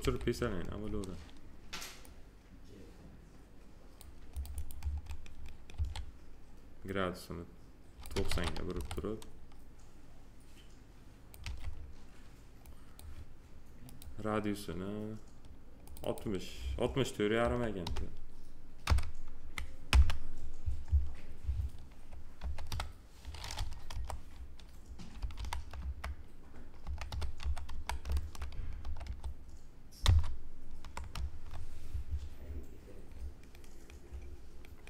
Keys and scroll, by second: 5.7 e, 8.3 ctrl+z, 8.7 a, 11.4 w, 17.4 6, 19.9 Return, 22.4 6, 23.9 BackSpace, 25.2 5, 25.8 Return, 26.8 6, 28.0 Return, 28.8 6, 31.1 Return.